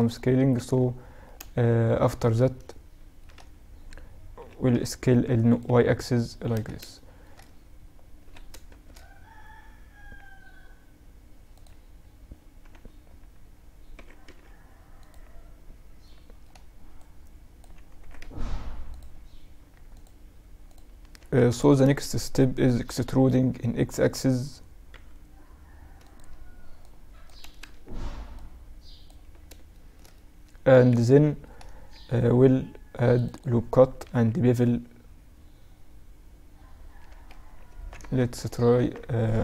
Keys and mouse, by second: 0.2-1.8 middle drag, 2.8 z, 3.8 s, 5.1 z, 6.0 z, 7.7-9.1 middle drag, 7.7 s, 13.4 s, 15.5-17.4 middle drag, 16.4 click, 17.4-18.3 drag, 17.4 s, 20.7 Tab, 21.2 a, 21.5 a, 22.2 e, 26.2-29.7 drag, 26.9 a, 27.1 a, 29.2-32.8 middle drag, 31.3 ctrl+r, 33.5 ctrl+b, 37.1 Tab, 37.4 ctrl+a, 38.2 Tab, 39.2 ctrl+b.